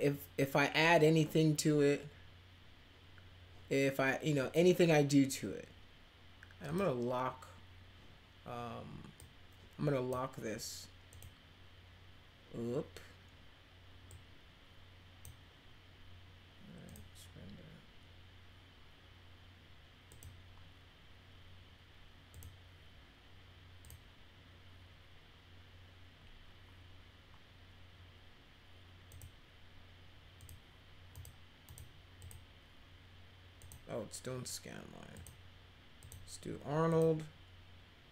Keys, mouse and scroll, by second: 6.6 click, 9.1 click, 11.1 click, 14.0-15.2 drag, 16.8 click, 20.0 click, 22.3 click, 23.8 click, 29.1 click, 30.4 click, 31.1 click, 31.6 click, 32.2 click, 33.5 click, 35.1 click, 36.0 click, 36.9 click.